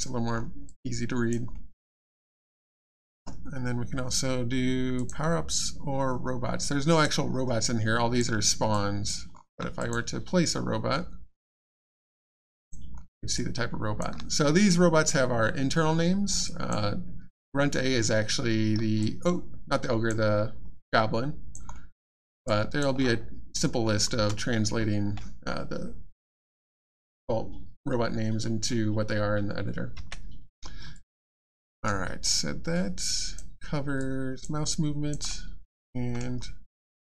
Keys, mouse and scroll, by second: 0.3-0.6 alt+scroll up 1, 0.6 alt+click, 1.5 alt+middle click, 2.3 alt+click, 4.9 click, 6.6 alt+click, 7.2 alt+scroll down 1, 7.6 alt+click, 8.7 click, 9.4 alt+scroll up 1, 9.8 click, 11.7 click, 12.4 alt+click, 16.4 click, 19.0 alt+click, 20.4-20.9 alt+scroll down 1, 20.9 alt+click, 21.7 alt+middle click, 22.2 alt+scroll up 1, 22.4 alt+click, 23.6 scroll down 1, 24.1 space, 30.9 alt+click, 31.6 alt+middle click, 31.8 alt+scroll down 1, 32.2 alt+click, 34.0 alt+click, 35.7 middle click, 36.2 scroll down 1, 36.8 alt+click.